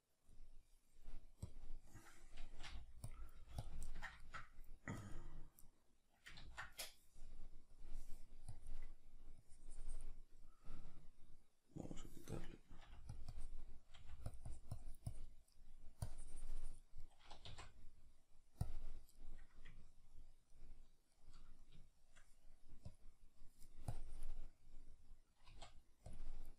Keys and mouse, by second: 2.7 click, 2.7 f, 3.4 f, 3.7 click, 3.9-5.7 ctrl+middle drag, 5.7-12.8 drag, 6.5 ctrl+z, 12.8 f, 14.0 click, 14.0 f, 15.6 middle click, 16.0-17.1 drag, 17.1-24.0 middle drag, 18.7 z, 24.0 click, 24.9-26.5 middle drag, 25.5 z.